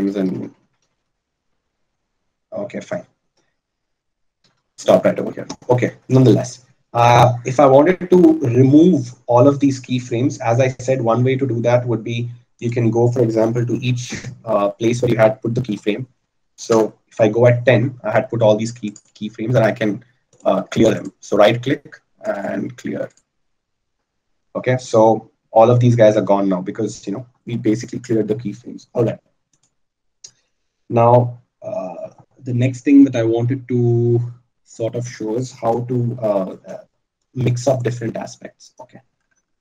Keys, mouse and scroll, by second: 11.8-20.8 middle drag, 20.8-32.2 right drag.